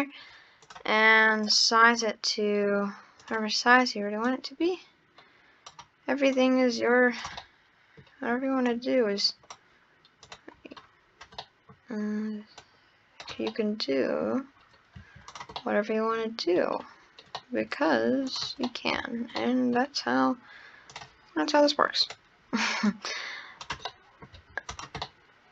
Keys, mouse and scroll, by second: 0.6 click, 1.9 click, 3.2-4.4 drag, 6.4 click, 7.4-8.7 middle drag, 8.7 click, 10.3 click, 11.5-12.6 middle drag, 12.6 click, 13.5-14.7 middle drag, 14.7 scroll down 3, 15.0 Tab, 15.3 click, 15.6-16.8 middle drag, 16.8 scroll down 1, 17.1 scroll up 2, 17.4-18.3 middle drag, 18.3 click, 18.7-19.0 middle drag, 19.0 Tab, 19.4-20.9 middle drag, 20.9 click, 22.0 click, 22.9 click, 23.9 middle click, 24.4 Tab, 24.7 click, 25.0-25.5 middle drag.